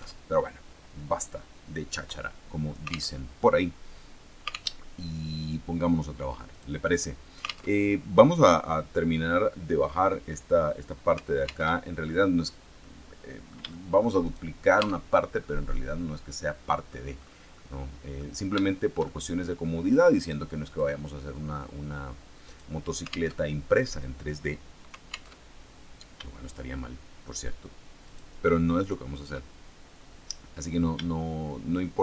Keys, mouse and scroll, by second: 0.1 alt+Tab, 3.1 alt+Tab, 4.7 alt+Tab, 6.4 right click, 7.7 alt+Tab, 11.7 alt+Tab, 12.7-13.9 drag, 13.9 shift+middle click, 14.7 shift+Tab, 15.3-17.0 middle drag, 17.5 middle click, 18.5-19.5 shift+middle drag, 20.6 click, 22.4 right click, 23.3 alt+Tab, 25.3 alt+Tab, 28.0 shift+right click, 28.7 shift+right click.